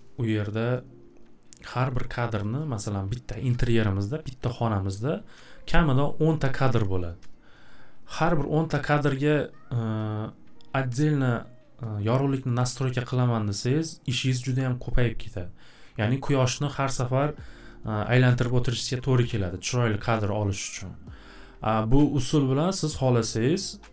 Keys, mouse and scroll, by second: 2.6 click, 2.8 click.